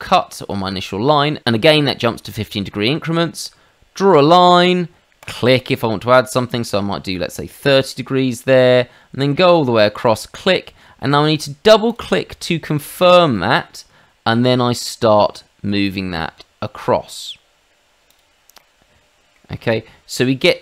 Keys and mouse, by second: 1.8 click, 5.2 click, 7.8 click, 10.0 click, 11.9 click, 12.0 click, 12.8 middle click, 18.0 click, 18.5 middle click, 19.6 middle click.